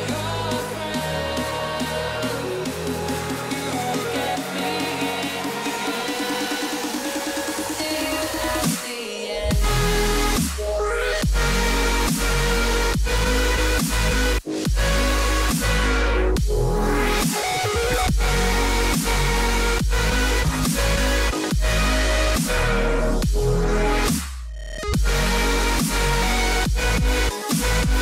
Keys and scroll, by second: 9.4 h, 11.1 b, 12.0 x, 13.0 [, 18.1 x, 21.4 h, 22.6 \, 26.9 ctrl+alt+shift+e.